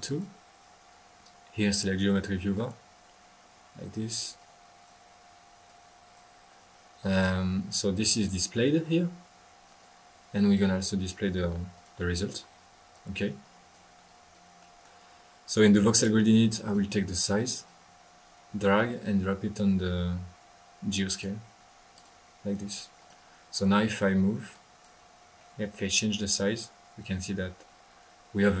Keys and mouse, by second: 0.1-0.7 drag, 1.6-1.9 drag, 2.5 click, 2.9 click, 4.3-6.4 drag, 7.0 click, 8.1 click, 8.5 click, 9.6 drag, 10.3 drag, 10.7 drag, 11.7 click, 12.5 click, 13.4-14.6 drag, 14.6-15.0 middle drag, 15.9-16.3 drag, 16.5-17.1 drag, 17.6-21.3 drag, 22.9 drag, 23.5 drag, 24.5 click, 25.2 click, 25.4-28.6 middle drag.